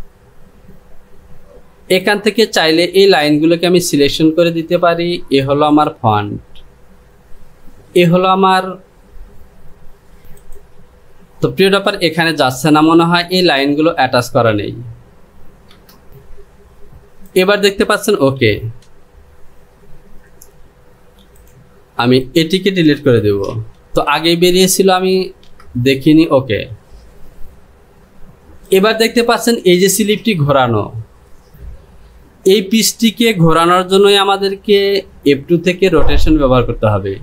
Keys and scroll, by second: 18.7 j, 34.3 s.